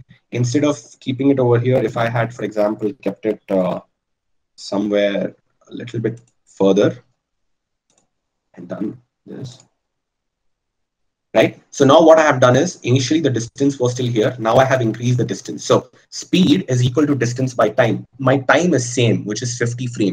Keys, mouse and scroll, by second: 4.1 g, 7.4 i.